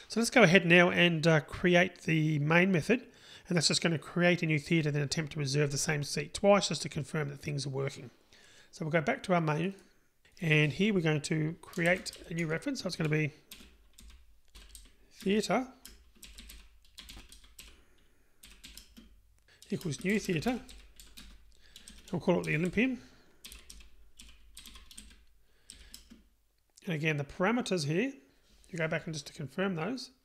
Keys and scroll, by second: 12.2 Delete, 15.2 Tab, 19.2 Return, 21.2 Return.